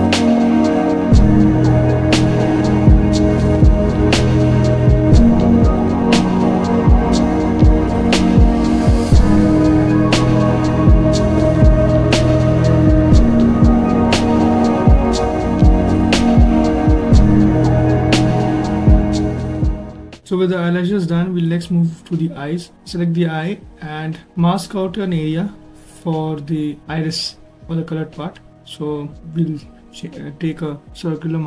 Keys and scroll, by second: 1.1 s, 2.6 ctrl+shift+z, 12.0 ctrl+z, 17.2 ctrl+z.